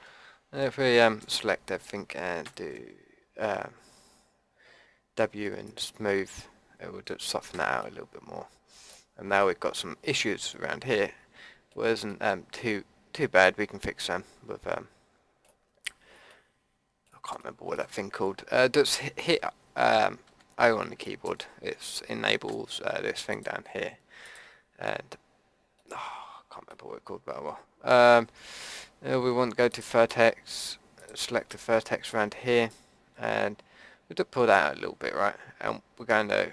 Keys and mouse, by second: 1.2 a, 2.4 w, 7.5 a, 13.6 click, 13.8 middle click, 15.6 middle click, 16.5-17.6 middle drag, 20.3 o, 22.5 o, 23.3-25.0 drag, 25.9 click, 26.3 middle click, 26.4 click, 26.6-27.9 middle drag, 29.7-31.5 middle drag, 31.5 click, 31.9-34.5 drag.